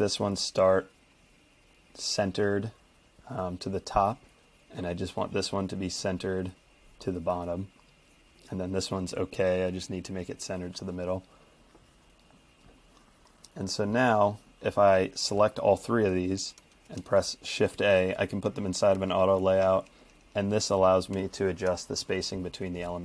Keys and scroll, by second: 16.9 shift+a, 19.0 shift+scroll up 1, 19.1 shift+Page_Up, 20.4 shift+Page_Down, 21.1 shift+Page_Up.